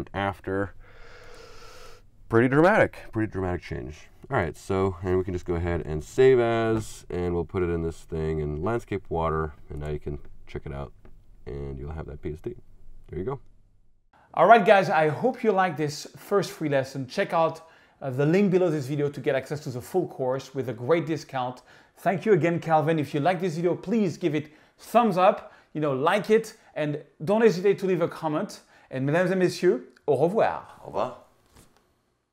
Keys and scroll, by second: 6.1 shift+super+s.